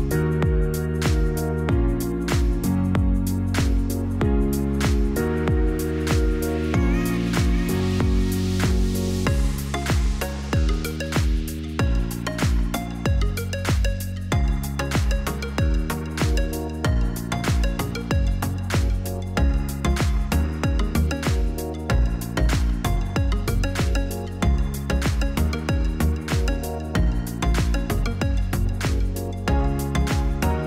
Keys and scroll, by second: 0.4 ctrl+z.